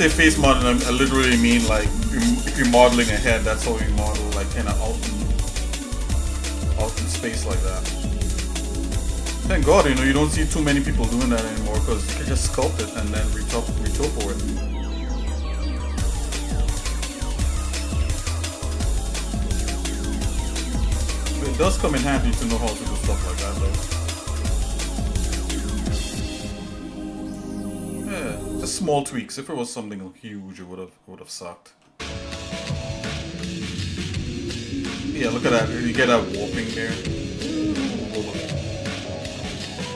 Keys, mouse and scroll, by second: 0.5 click, 3.7-4.5 scroll down 2, 4.1-5.6 shift+middle drag, 5.9 middle click, 6.2 middle click, 6.7 shift+middle click, 7.8 middle click, 9.0 scroll up 1, 9.5-10.1 scroll down 2, 10.1 scroll up 1, 11.1-12.2 drag, 12.6-13.9 shift+middle drag, 14.6-16.0 drag, 16.0 shift+middle click, 17.3 click, 18.8 click, 20.9 click, 21.5-23.6 drag, 23.6-25.1 shift+middle drag, 26.5-27.5 drag, 28.0-28.4 scroll down 1, 28.6-30.6 shift+middle drag, 30.9 middle click, 31.5 shift+middle click, 32.0-32.6 scroll down 3, 32.8 shift+middle click, 33.2 Tab, 33.8-35.3 shift+middle drag, 36.4 shift+middle click, 37.7 shift+middle click, 38.2 scroll up 1, 38.8 scroll up 1, 39.2 Tab, 39.8 scroll up 1.